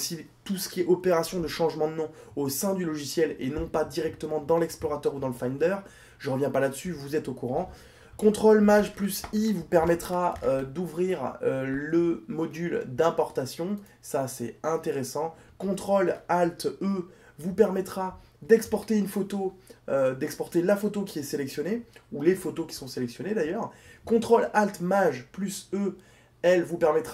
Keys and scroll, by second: 7.9 ctrl+shift+i, 16.9 ctrl+alt+e.